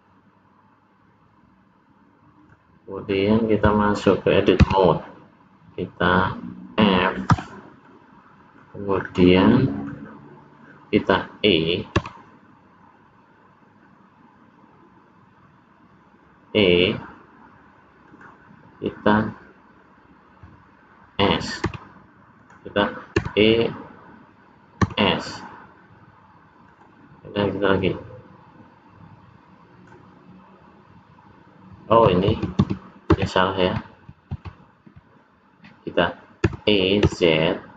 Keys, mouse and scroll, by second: 4.6 Tab, 7.3 f, 7.8 middle click, 8.9-9.5 scroll up 3, 9.5 middle click, 12.0 e, 21.6 s, 23.2 e, 27.8 click, 32.3 ctrl+z, 32.6 ctrl+z, 33.1 ctrl+z, 34.3 ctrl+z, 36.4 e.